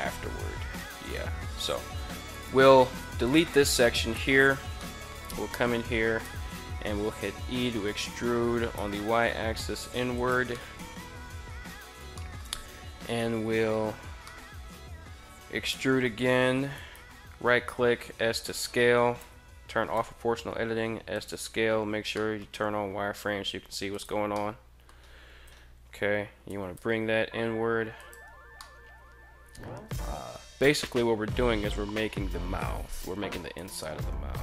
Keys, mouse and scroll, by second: 1.8 right click, 2.4 x, 3.9 alt+right click, 4.3 middle click, 5.7 e, 8.1 y, 9.7 click, 10.0-11.1 middle drag, 11.7 shift+scroll up 2, 13.7-14.2 scroll up 2, 15.2 e, 16.2 right click, 17.2 s, 17.9 right click, 18.7 o, 19.4 s, 20.6 click, 20.8 z, 21.7 middle drag, 22.7 s, 23.4 click, 23.9 middle click, 24.8 KP_3, 25.9 g, 26.2 y, 27.5 click, 28.0-29.6 middle drag, 31.4 KP_3, 32.9 e.